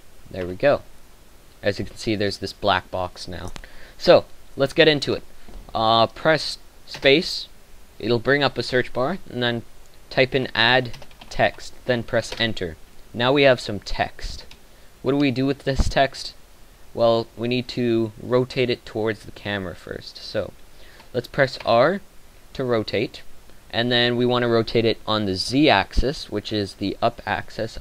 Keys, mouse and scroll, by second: 0.7 n, 7.0 space, 10.8 d, 22.2 r.